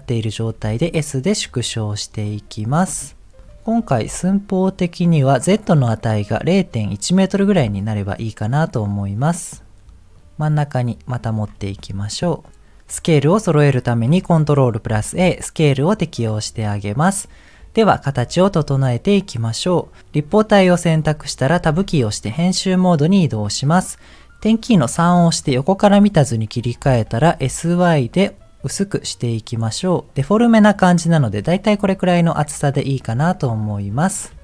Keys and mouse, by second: 0.8 s, 4.0 s, 7.5 s, 12.2 shift+middle click, 21.9 Tab, 24.9 KP_3, 26.8 s, 30.5 middle click, 31.6-32.8 middle drag, 34.3 KP_7.